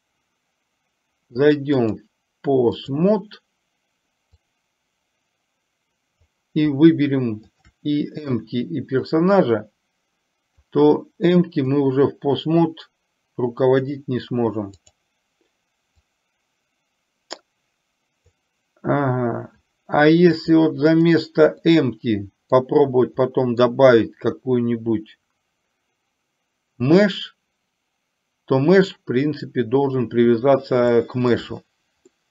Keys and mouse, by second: 1.9-3.2 drag, 4.6-6.4 drag, 7.6 shift+click, 9.2-10.8 drag, 11.4-11.9 drag, 14.8-15.2 drag, 16.2-18.6 drag, 20.4 click, 21.7 middle click, 23.3 middle click, 31.1-31.4 shift+middle drag.